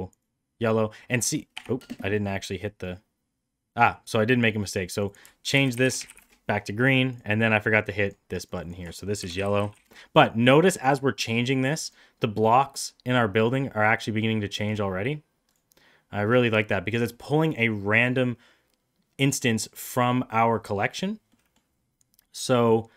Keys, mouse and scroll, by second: 2.2 drag, 4.1 click, 4.9 click, 5.1-6.7 shift+drag, 6.0 e, 8.0 click, 8.5 click, 8.6-10.4 drag, 9.6 l, 11.8 click, 21.3 middle click.